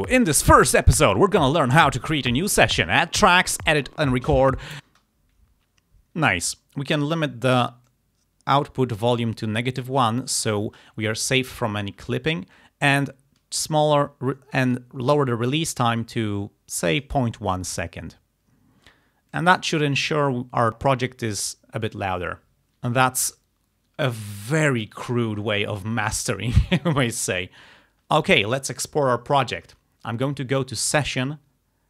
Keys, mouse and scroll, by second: 4.9 space, 7.9-10.7 drag, 12.9-15.0 drag, 15.2-17.3 drag, 19.3 click, 30.8 click.